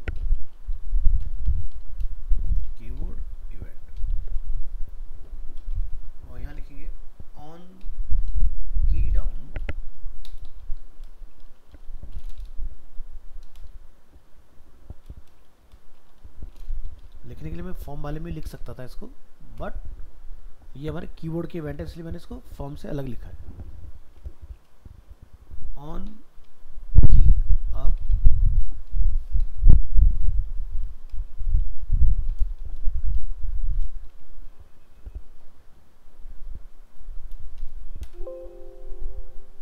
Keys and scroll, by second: 4.4 ctrl+s, 33.2 ctrl+s, 34.1 alt+Tab.